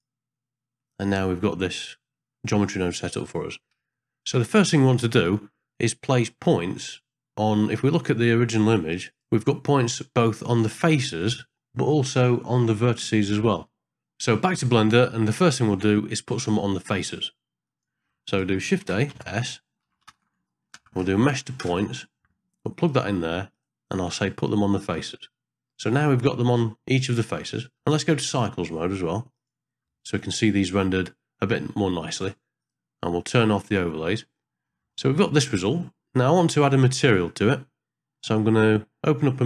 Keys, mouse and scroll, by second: 0.8 middle click, 4.0 shift+middle click, 17.8 middle click, 18.3 click, 18.9 shift+a, 23.5-25.0 drag, 27.3 middle click, 29.4 click, 32.6 click, 34.4 middle click, 35.0 ctrl+middle click, 35.9 middle click.